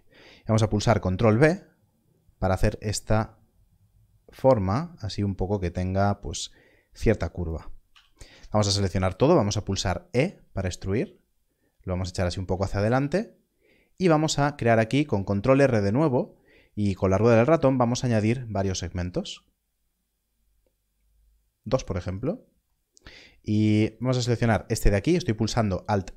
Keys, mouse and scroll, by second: 1.2 ctrl+b, 3.6-4.0 scroll up 1, 7.4 click, 8.4 a, 10.0 e, 12.0 click, 12.9 ctrl+r, 14.2-15.0 scroll up 1, 15.0-15.4 scroll down 1, 15.4-16.6 scroll up 1, 16.6-16.9 scroll down 1, 16.9-17.3 scroll up 1, 17.3 scroll down 1, 17.8-19.7 scroll up 1, 20.4-21.6 scroll up 1, 22.1 right click, 24.6 scroll up 1.